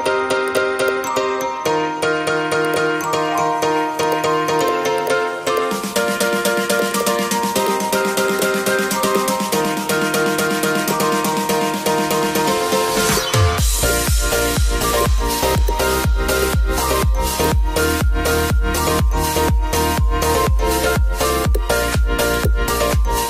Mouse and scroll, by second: 4.1 click.